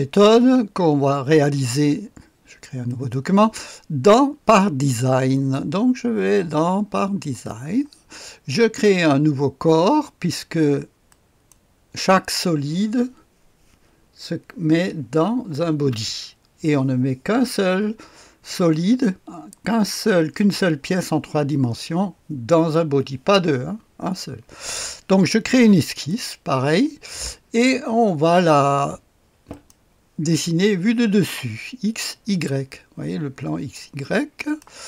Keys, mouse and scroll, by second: 2.8 click, 5.3-7.5 middle drag, 7.5 click, 11.1 middle click, 11.5 click, 25.8 middle click, 26.1 click, 29.5 click, 34.4 click.